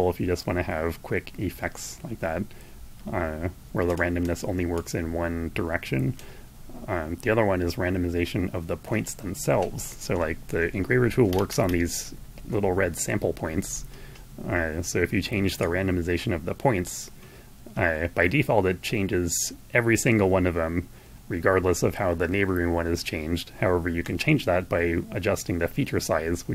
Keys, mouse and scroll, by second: 4.3-5.9 drag, 9.6 p, 13.9 scroll down 2, 15.1-23.7 drag.